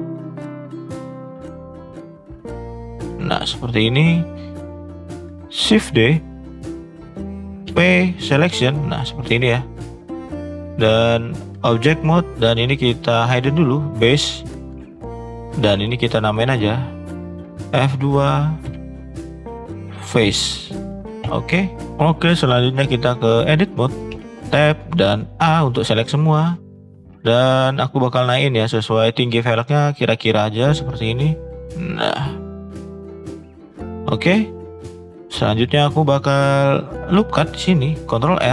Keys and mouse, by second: 1.2 shift+click, 1.9 shift+click, 2.4 shift+click, 3.8 shift+middle click, 6.3 shift+d, 7.6 p, 10.5 click, 15.1 h, 18.6 F2, 24.2 Tab, 25.3 a, 25.9 middle drag, 27.6 click, 28.0 middle click, 28.9-30.9 drag, 31.3 middle click, 32.6 middle click, 33.0 shift+middle click, 33.6 middle click, 34.8 click, 35.6 shift+middle click, 36.4 shift+middle click, 37.1 click, 37.8 ctrl+r.